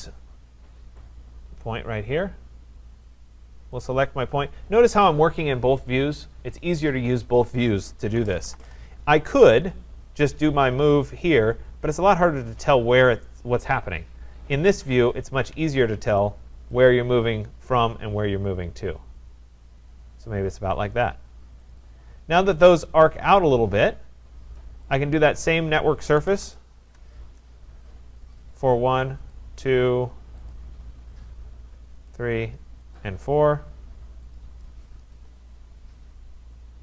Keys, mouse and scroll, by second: 0.7-1.8 scroll, 1.8-3.2 scroll, 3.9 click, 7.9-8.9 typing, 10.6 click, 14.6 click, 15.5 Escape, 16.2 right click, 16.8 click, 20.0 click, 21.7 click, 21.9 click, 24.5 right click, 24.9 click, 25.4 scroll, 25.9-26.8 typing, 26.3 middle click, 28.4 click, 29.4 click, 30.5 click, 32.1 click, 33.0 click, 34.4 click, 35.1 Return.